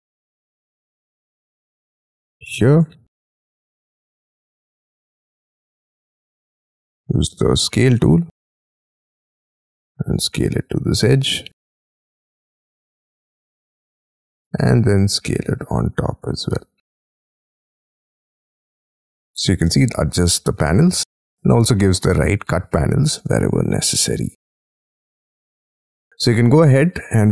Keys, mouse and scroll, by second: 0.0-0.8 scroll down 14, 0.8 middle click, 1.4-1.9 scroll up 9, 3.9 scroll down 5, 4.2 Right, 5.9 middle click, 6.2 s, 8.2 scroll down 3, 15.9-16.5 scroll up 8, 18.1 scroll up 16, 19.2-19.6 scroll down 12, 19.7 middle click, 20.2 scroll down 2, 20.7 space, 21.2-22.4 scroll up 22, 22.5-23.8 scroll down 31, 24.4 middle click, 25.0-25.5 scroll down 12, 26.0 middle click.